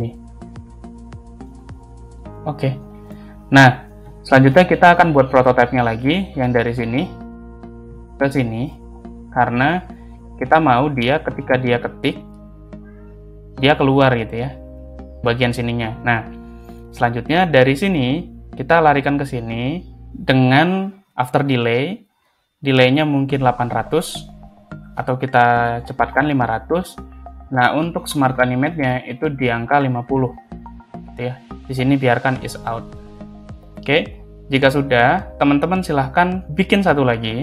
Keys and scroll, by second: 4.0 space, 5.9 ctrl+space, 16.4 space, 25.6 5, 26.3 Return, 34.9 space, 37.3 ctrl+c.